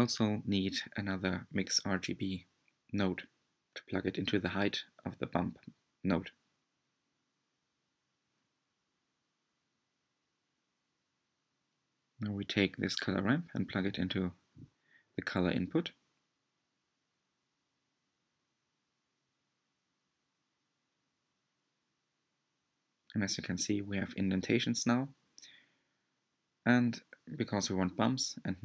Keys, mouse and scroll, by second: 0.6 click, 8.6 drag, 20.4 ctrl+shift+click, 24.8-26.6 middle drag, 26.6-27.3 scroll up 5, 27.3 click, 27.6 shift+a.